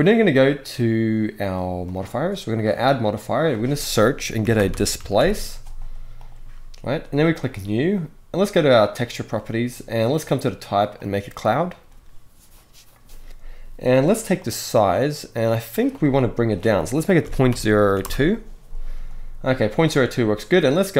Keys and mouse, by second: 2.5-6.1 drag, 7.1 click, 10.0-10.8 drag, 14.2-15.6 drag, 15.8-17.7 drag.